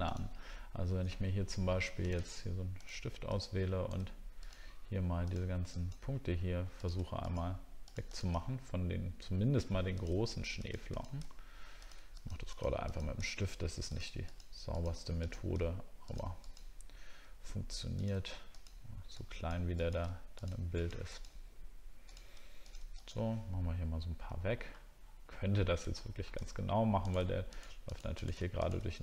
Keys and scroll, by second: 2.3 alt+scroll up 1, 24.7 alt+scroll up 1, 25.1 alt+scroll down 1, 25.6 alt+scroll down 1, 26.5 alt+scroll up 1.